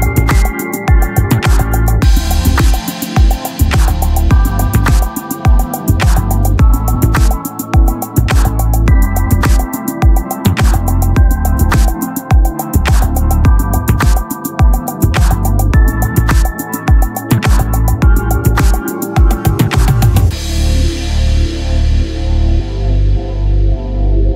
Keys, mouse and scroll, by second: 6.9 click, 8.6 s, 10.0 e, 13.5 e, 15.2 Tab, 23.3 ctrl+z.